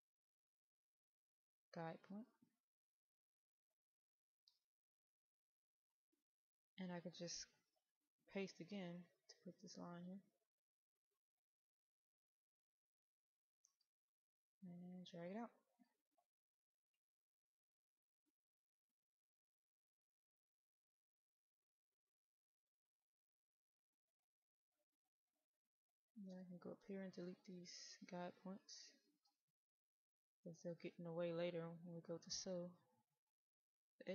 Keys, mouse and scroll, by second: 2.6 click, 8.5 ctrl+v, 11.2 click, 11.7-12.2 scroll up 1, 12.2 middle click, 12.6-13.0 scroll up 1, 13.1 middle click, 14.0-20.7 drag, 22.3 click, 23.1-23.6 scroll down 1, 24.3-26.3 middle drag, 26.3-26.8 scroll down 1, 26.8 middle click, 27.5-27.9 scroll down 1, 27.9-28.7 scroll up 1, 28.7-29.9 middle drag, 31.6 click, 32.2 right click, 33.1 click, 33.7 middle click.